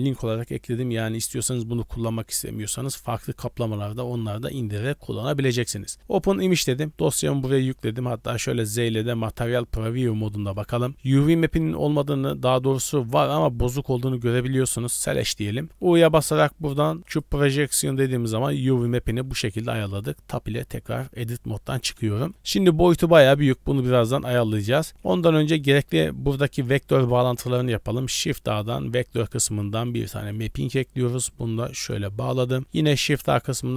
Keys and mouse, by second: 8.1 z, 9.7 click, 10.7 shift+middle click, 14.9 click, 15.6 middle click, 15.8 u, 17.6 middle click, 18.7 shift+middle click, 19.2 Tab, 19.5-21.9 middle drag, 22.2 shift+middle click, 23.7 middle click, 24.4 middle click, 25.1 middle click, 28.0 shift+a, 31.0-32.0 drag, 32.2 click, 32.6 shift+a.